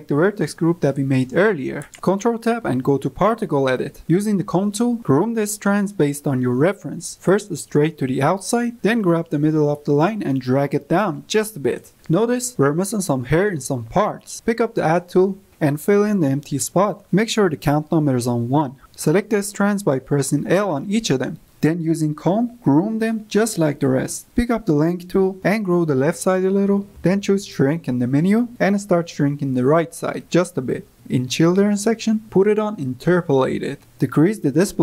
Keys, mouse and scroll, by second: 1.3 click, 2.3 ctrl+Tab, 2.4 middle drag, 2.5 drag, 2.7 click, 3.4 click, 3.8 ctrl+z, 3.9 click, 4.1 click, 4.3 click, 4.5 drag, 4.8 drag, 4.9 drag, 5.3 drag, 5.5 drag, 5.6 middle click, 5.8 drag, 6.0 drag, 6.2 click, 6.3 click, 6.6 click, 6.9 click, 7.1-7.5 drag, 7.6 drag, 7.7-8.1 drag, 8.2-9.2 drag, 9.4 drag, 9.7 click, 9.8 middle click, 10.1 click, 10.2 click, 10.3 middle click, 10.5 click, 10.7 drag, 10.8 middle drag, 11.1 click, 11.3 drag, 11.4 middle drag, 11.6 click, 11.9 click, 12.1 click, 12.3 click, 12.8 drag, 13.5 click, 13.9 click, 14.4 click, 15.5-16.2 drag, 16.2 middle click, 16.6-18.6 drag, 18.6 middle click, 19.0-19.5 drag, 19.5-20.6 typing, 20.7 click, 21.0 click, 21.2 ctrl+z, 21.2 click, 21.5 middle click, 21.7 click, 21.8 middle click, 22.0 click, 22.2 click, 22.4 middle click, 22.6 drag, 22.8 drag, 23.2 drag, 23.9 click, 24.0 drag, 25.5 f, 25.8 click, 26.3-26.9 drag, 27.3 ctrl+click, 28.3 click, 29.0 drag, 29.3 click, 29.4 drag, 29.7 drag, 30.1 drag, 30.4 click, 30.9-34.8 drag.